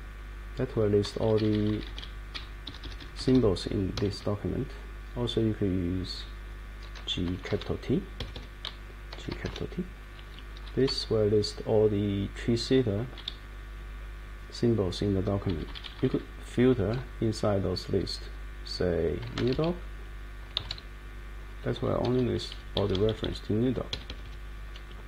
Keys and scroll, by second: 2.3 Down, 2.7 Up, 3.3 Up, 3.9 Escape, 5.0 Up, 5.9 Up, 7.0 g, 7.5 shift+t, 8.2 Escape, 8.3 Escape, 9.1 g, 9.5 shift+t, 10.8 Down, 11.6-12.7 Down, 13.8 Up, 14.3 Up, 14.9 Up, 15.0 Page_Up, 15.0 Page_Up, 15.1 Page_Up, 15.2 Page_Up, 19.1-21.1 typing, 22.0 Down, 22.3 Down, 22.5 Down, 22.8 Up, 22.9 Up, 23.1 Up, 23.2 Up, 23.9 Escape, 24.1 Escape, 24.2 Escape.